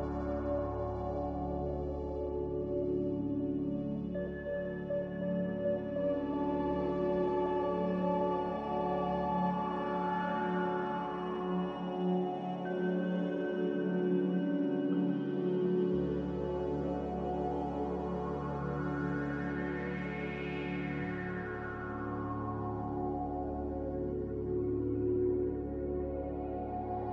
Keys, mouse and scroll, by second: 5.5 z, 7.3 Delete, 24.2 Delete.